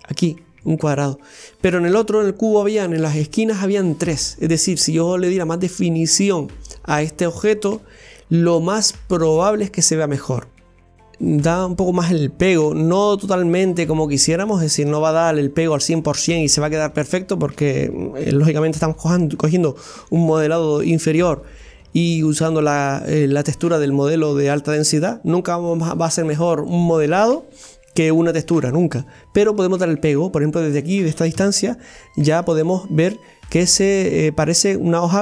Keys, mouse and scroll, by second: 0.1 click, 0.1 right click, 11.1 click, 11.7-12.1 scroll up 1, 12.1-15.5 middle drag, 15.5 scroll down 1, 16.0-31.4 middle drag, 31.4 Tab, 31.8-32.2 scroll down 1, 32.2 middle click, 32.6 Tab, 33.1 right click, 33.5-35.2 middle drag.